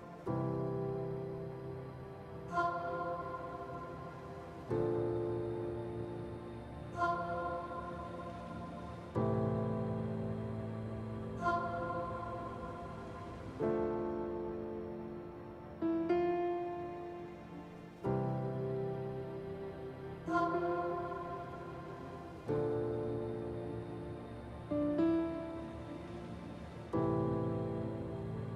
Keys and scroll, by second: 9.1 ctrl+z, 11.4 F3, 20.5 F3, 20.9 F3, 22.1 F3.